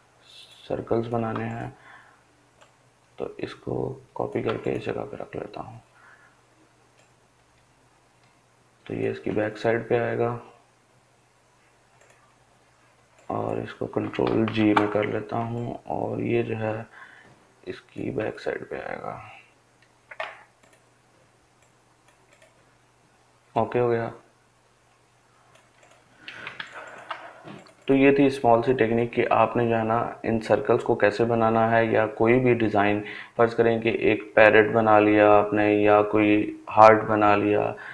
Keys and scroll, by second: 13.1 ctrl+g.